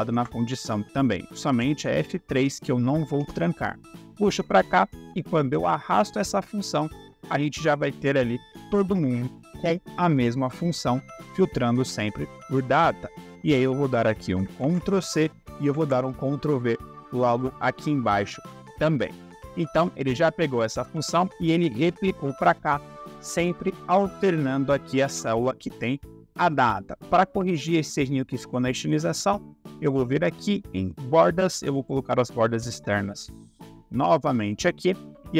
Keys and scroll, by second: 0.0 F4, 3.1 Return, 14.5 ctrl+c, 16.8 ctrl+v.